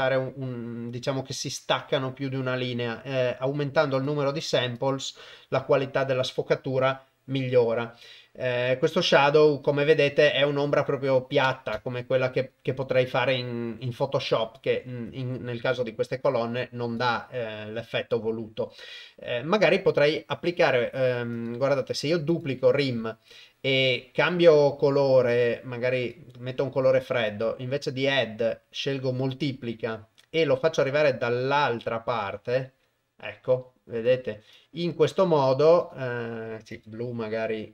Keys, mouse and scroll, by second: 3.9 click, 4.4 click, 4.7 click, 11.8-14.5 shift+drag, 16.9 click, 20.3 click, 21.3-22.4 drag, 24.3 click, 27.2-29.4 drag, 30.8-34.0 drag, 34.6-35.8 drag, 36.7 click.